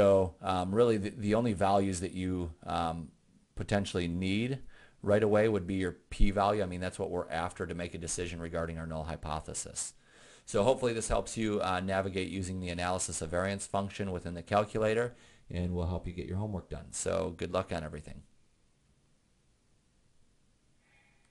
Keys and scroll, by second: 1.0 Up, 1.8 Up, 2.8 Up.